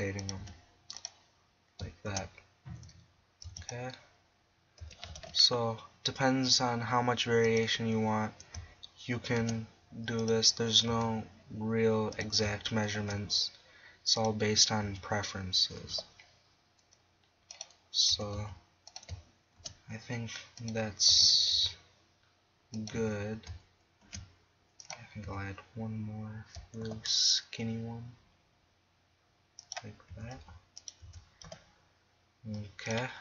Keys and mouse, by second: 0.4 s, 2.1 shift+d, 3.0 click, 4.8 s, 7.6 click, 9.4 shift+d, 10.4-11.0 drag, 11.0 s, 12.2 click, 13.0 shift+d, 14.9 s, 18.1 s, 19.0-21.1 drag, 19.6 shift+d, 21.1 s, 22.7 click, 24.1 shift+d, 25.0-26.8 drag, 25.3 s, 29.7-31.0 drag, 30.1 s, 31.0 s, 32.9 click.